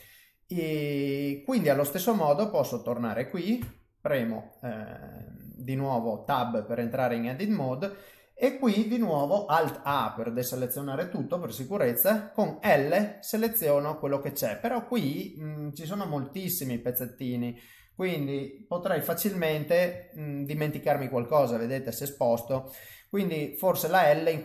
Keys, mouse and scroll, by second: 0.0 middle click, 1.9 click, 2.2 middle click, 3.6 Tab, 4.1 middle click, 5.2 shift+middle click, 5.9 middle click, 9.8 alt+a, 12.6 l, 13.4 l, 16.7 l, 17.7 l, 19.4 g, 22.5 ctrl+z, 23.4 middle click.